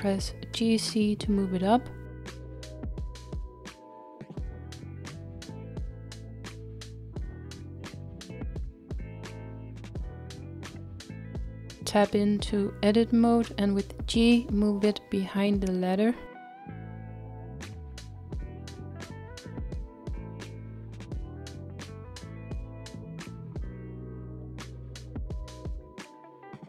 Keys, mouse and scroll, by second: 0.2 g, 13.9 scroll down 2, 16.1 g.